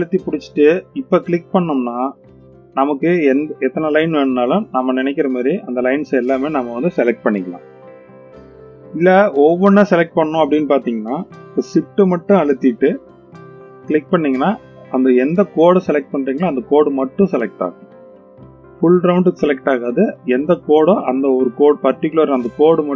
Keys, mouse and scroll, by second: 1.7 alt+shift+click, 3.3 alt+shift+click, 4.5 alt+shift+click, 5.8 alt+shift+click, 7.8-8.9 middle drag, 10.9 click, 13.7 shift+click, 15.0 shift+click, 16.5 shift+click, 17.6 shift+click, 18.8 shift+click, 20.3-21.2 middle drag, 22.4 shift+click.